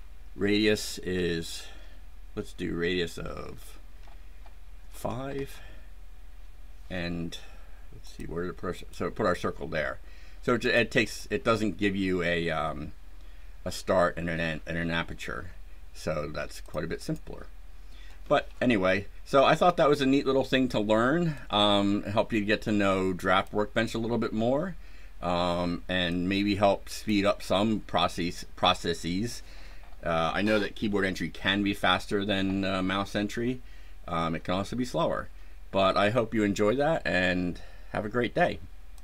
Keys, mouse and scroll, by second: 4.8 KP_5, 5.2 KP_Enter, 8.0 click, 8.7 click, 10.6 click, 10.9 click, 16.6 click, 18.2 scroll down 2, 18.7 scroll up 2, 21.2-23.5 drag, 26.0 click.